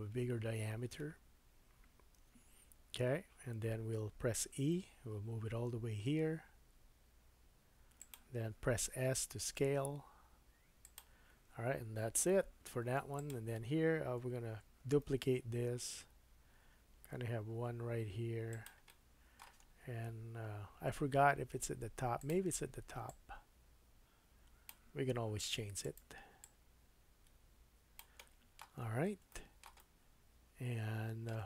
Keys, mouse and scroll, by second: 2.2 KP_1, 4.6 e, 9.0 s, 12.6 Tab, 13.2 click, 15.1 shift+d, 18.9-22.2 middle drag, 19.6-21.7 scroll down 2, 22.2 click, 22.3 middle click, 23.1-26.4 drag, 25.4 shift+d, 28.2 middle click, 28.8-29.3 scroll down 3, 29.3 shift+middle click, 29.8 middle click.